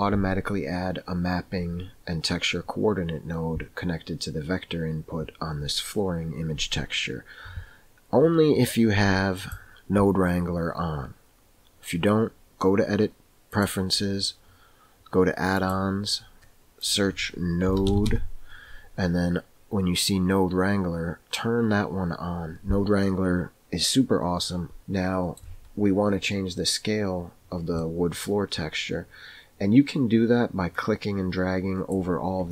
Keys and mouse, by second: 9.4-13.8 drag, 24.8 shift+middle click, 27.9 middle click, 30.8-32.5 drag.